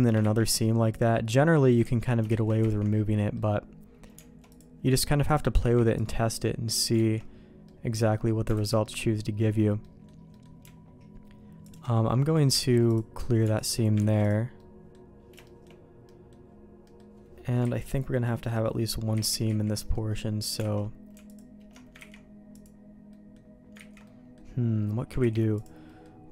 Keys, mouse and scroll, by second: 0.5 ctrl+e, 2.2 ctrl+z, 2.6 ctrl+z, 3.2 middle click, 4.5 click, 5.6 ctrl+e, 7.0 ctrl+z, 7.6 middle click, 8.5 alt+a, 8.8 middle click, 9.8 middle click, 10.3 middle click, 11.6 alt+click, 12.8 ctrl+e, 14.2 ctrl+e, 14.6 middle click, 15.4 shift+middle click, 16.1 middle click, 16.8 middle click, 19.1 ctrl+z, 19.5 ctrl+z, 19.9 middle click, 20.7 alt+a, 22.0 ctrl+e, 23.1 middle click, 23.8 ctrl+z, 24.0 middle click, 25.2 ctrl+e, 25.9 middle click.